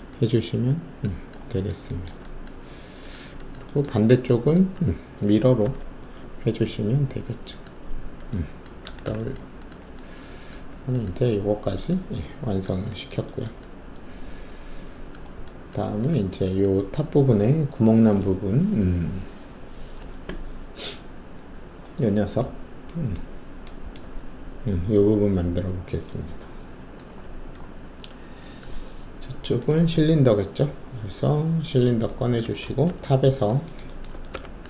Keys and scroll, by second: 5.6 ctrl+alt+e, 8.8 alt+w, 32.8 alt+shift+2, 34.3 alt+4.